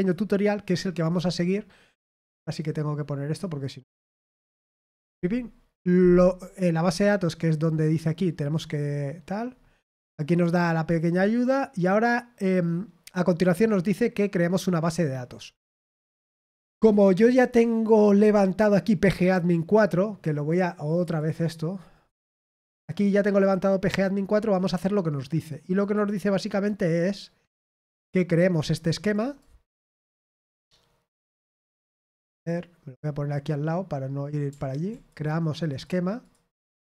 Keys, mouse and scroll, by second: 2.5 click, 3.0 click, 4.1-5.4 scroll down 4, 8.3-8.8 scroll down 2, 9.4-9.8 scroll down 1, 11.0-11.6 scroll down 2, 12.3-12.7 scroll down 1, 18.8 click, 21.0 click, 25.7 click, 27.7-28.3 scroll down 2, 28.6 click, 28.8 click, 29.0 click, 29.9 click, 31.2 click, 32.4 click, 34.9 click, 35.6 click, 36.2 ctrl+click.